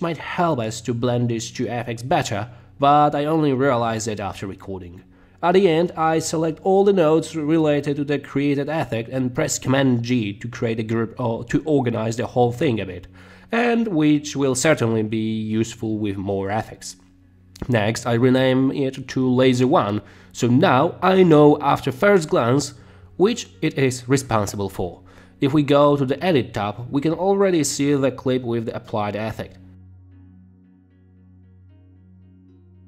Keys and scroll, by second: 18.0 a, 18.6 r, 18.7 space, 19.5 Return, 31.7 space.